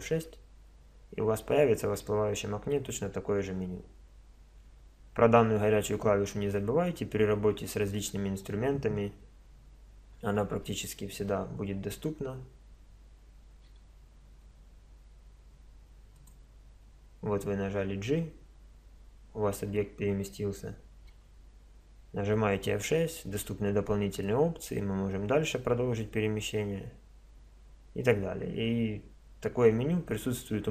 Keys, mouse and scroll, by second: 13.7 g, 21.1 F6.